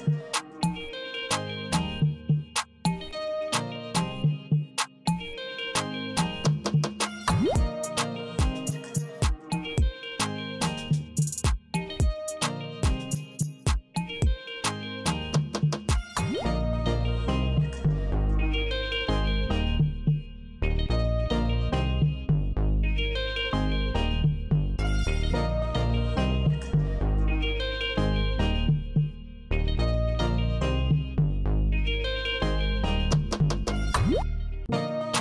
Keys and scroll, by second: 0.7 d, 10.4 Return, 12.2 Return, 20.3 Return, 22.3 F5, 24.3 alt+e, 25.3 n, 26.1 d, 31.4 Return, 33.2 Return, 35.1 Return.